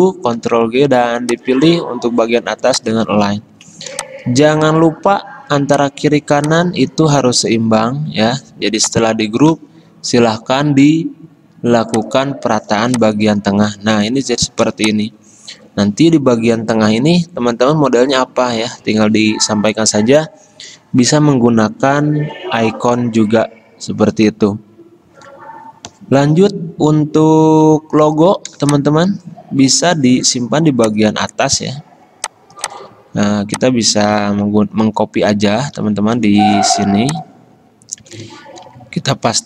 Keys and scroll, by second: 0.6 ctrl+g, 5.1 ctrl+g, 7.5 ctrl+g, 34.7 ctrl+v, 36.1 ctrl+z, 36.9 ctrl+c, 37.8 Escape.